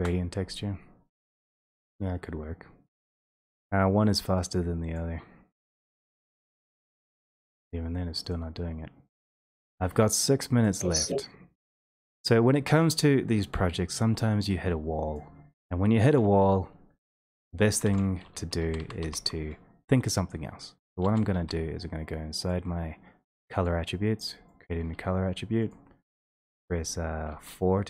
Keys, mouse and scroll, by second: 1.4 click, 3.2 click, 3.6 typing, 4.3 click, 5.0 click, 5.0 typing, 8.7 click, 10.6 click, 14.3 click, 17.8 click, 17.9 alt+space, 18.6-19.0 typing, 21.0 ctrl+a, 21.3 Escape, 22.5 click, 24.6 click, 25.8 click, 26.2 4, 27.3 4.